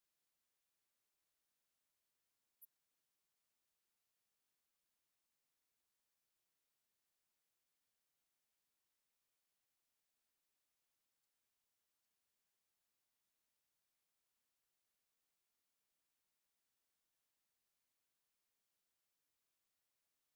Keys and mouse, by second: 6.6 right click.